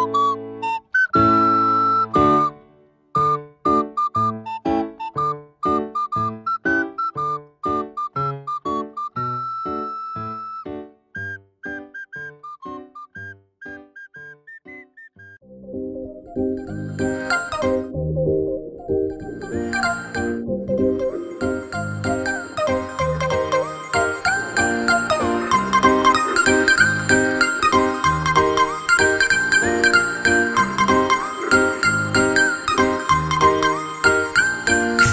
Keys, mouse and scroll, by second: 3.5-6.5 drag, 11.5-14.0 middle drag, 14.0-16.9 drag, 16.9-19.9 middle drag, 23.2-26.5 scroll up 9, 26.5 click, 29.0-34.6 drag, 35.0-35.1 drag.